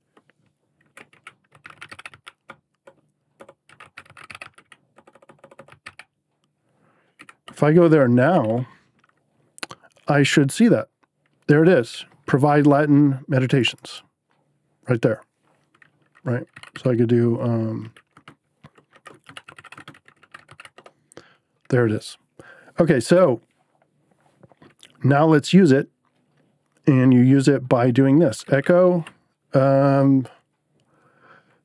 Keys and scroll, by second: 0.0-6.3 typing, 7.1 Right, 8.0-8.8 typing, 16.2-20.9 typing, 28.0-29.4 typing.